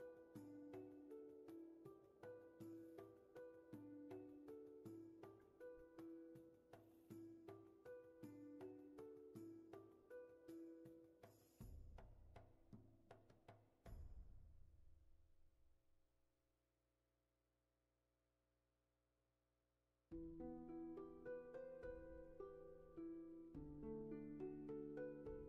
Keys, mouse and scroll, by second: 7.2 ctrl+z, 19.1 ctrl+z, 24.2 ctrl+z.